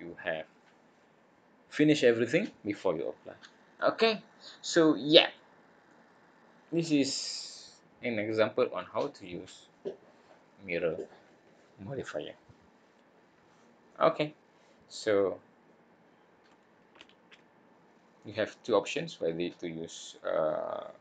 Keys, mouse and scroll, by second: 3.7 scroll up 1, 3.7 middle click, 5.2-6.0 scroll down 3, 5.8 middle click, 7.0-7.7 scroll up 1, 8.7 scroll up 1, 13.9 middle click.